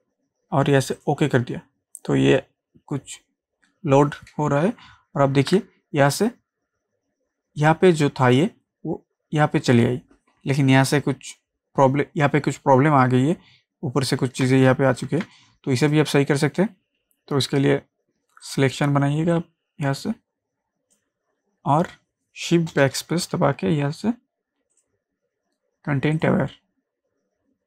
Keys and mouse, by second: 1.0 click, 4.8 ctrl+Num_Lock, 4.8 click, 5.4 ctrl+d, 14.2 ctrl+d, 14.5 ctrl+space, 14.6 ctrl+click, 15.0 ctrl+space, 15.3 click, 15.8 space, 18.4-24.7 drag, 24.7 click.